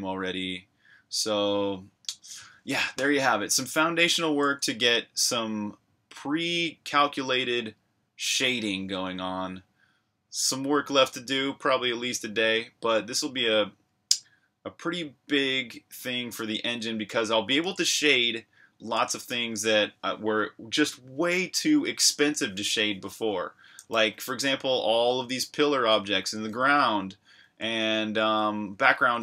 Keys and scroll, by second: 17.8 super+Tab, 19.5 super+r, 19.8-20.7 typing, 26.6-29.2 typing.